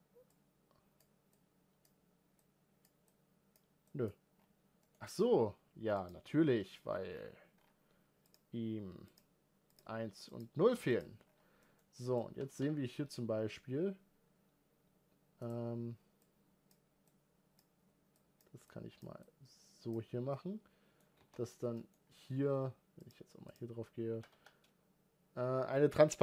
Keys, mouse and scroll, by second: 0.1-4.1 drag, 4.1-4.7 scroll down 3, 4.7-8.1 middle drag, 8.1-11.0 drag, 11.0 scroll up 1, 11.4 middle click, 12.1 g, 16.0-20.1 drag, 20.1-21.0 middle drag, 21.0 alt+a, 21.5-22.7 middle drag, 22.7 click, 24.0 g.